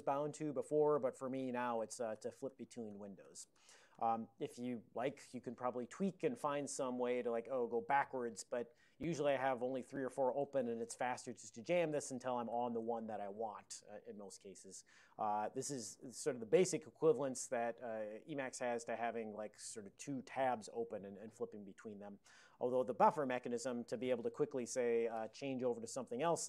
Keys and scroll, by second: 1.5 alt+o, 1.8 alt+o, 2.2 alt+o, 2.6 alt+o, 3.0 alt+o, 3.6 alt+o, 4.0 alt+o, 11.3 alt+o.